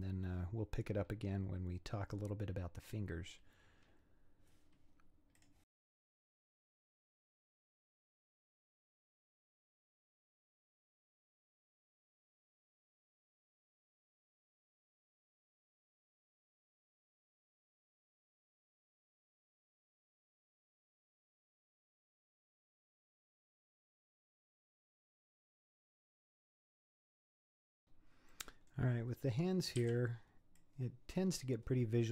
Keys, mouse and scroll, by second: 0.9-2.5 scroll down 1, 2.9-5.4 middle drag, 5.4 click, 5.7 Tab, 5.8-10.2 typing, 5.9 scroll down 5, 6.0-6.6 scroll up 8, 6.2 middle click, 6.4 click, 7.0 shift+click, 7.6 scroll down 3, 7.7 scroll up 4, 8.0 click, 8.8 scroll down 3, 8.9 scroll up 5, 9.0 click, 9.6 click, 9.9 click, 10.5 scroll down 3, 10.6 scroll up 3, 10.7-11.0 scroll down 6, 11.0 scroll up 2, 11.1 scroll down 1, 11.2 click, 11.3 scroll up 1, 11.4-26.7 typing, 11.6 shift+click, 12.1 shift+click, 12.5 scroll down 2, 12.5 scroll up 8, 12.8 middle click, 12.9 click, 13.4 scroll down 1, 13.5 scroll up 3, 13.9 click, 14.4 scroll down 6, 14.6 scroll up 4, 14.8 scroll down 3, 14.8 middle click, 15.3 scroll up 2, 15.4 click, 16.0 ctrl+z, 16.4 scroll down 4, 16.7-17.1 scroll up 11, 17.1 click, 17.5 click, 18.7 middle click, 19.3 middle click, 19.8 scroll down 3, 19.8 middle click, 19.9 scroll up 3, 20.0 middle click, 21.1 scroll up 1, 21.2 click, 21.4 click, 21.8 click, 21.9 scroll down 3, 22.0 scroll up 2, 22.0 click, 22.2 click, 22.8 shift+click, 23.1 scroll down 4, 23.2 scroll up 4, 23.5 click, 24.2 click, 24.8 click, 25.3 click, 25.7 scroll down 5, 25.8 scroll up 6, 26.1 click, 26.6 click, 26.8 scroll down 6, 26.9 scroll up 5, 26.9 scroll down 1, 27.0 middle click, 27.5 scroll up 1, 27.6 middle click, 27.8 scroll down 5, 28.3 middle click, 29.1 scroll up 3, 29.8 c.